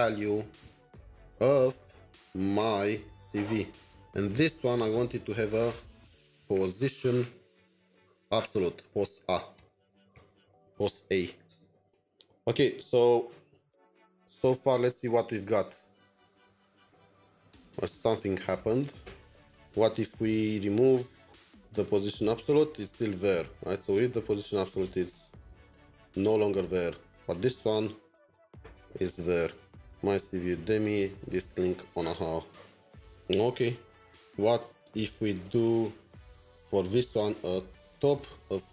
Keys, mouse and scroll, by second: 0.0-4.4 typing, 5.5 Return, 6.3-7.1 typing, 8.2 typing, 9.5 typing, 10.1 ctrl+s, 10.9 alt+Tab, 13.1 alt+Tab, 13.1-14.4 scroll down 3, 37.7-38.7 typing, 37.8 scroll.